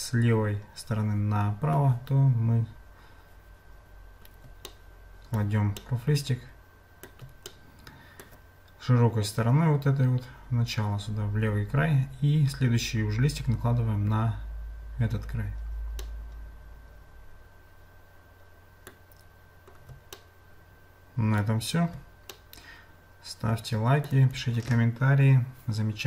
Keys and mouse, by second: 4.7 shift+middle click, 5.8-7.1 middle drag, 7.5 shift+middle click, 16.0-19.0 middle drag, 20.2-21.4 shift+middle drag, 22.3-24.1 shift+middle drag.